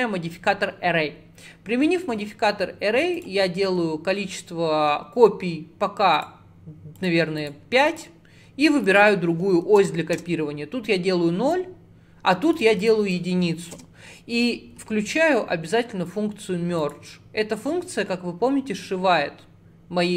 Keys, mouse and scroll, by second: 3.2-12.6 drag, 12.8-16.0 drag, 16.9 click, 18.6-19.0 scroll up 2, 19.0 scroll down 2, 19.6-20.1 scroll up 1.